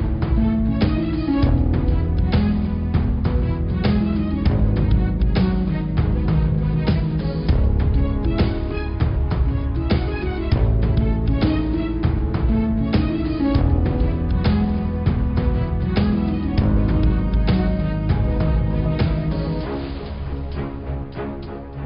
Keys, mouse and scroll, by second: 0.0 Tab, 0.3 scroll down 3, 0.7 middle click, 1.3 click, 1.7-2.0 scroll up 2, 2.0-2.6 scroll down 9, 2.6-2.9 scroll up 5, 3.4 click, 3.8-5.7 middle drag, 5.7 Tab, 6.0 middle click, 6.7-7.3 scroll down 4, 7.3 click, 7.7-8.0 scroll up 4, 8.0 click, 8.6-9.1 scroll up 1, 9.5 click, 10.7 click, 10.8 click, 11.2-11.9 scroll up 6, 12.7 click, 13.9 click, 14.3 click, 15.3 g, 17.4 scroll down 5, 17.7 middle click, 18.3-18.8 scroll down 6, 18.8-19.2 scroll up 9, 20.4 click, 20.9 click, 21.3-21.8 scroll up 8.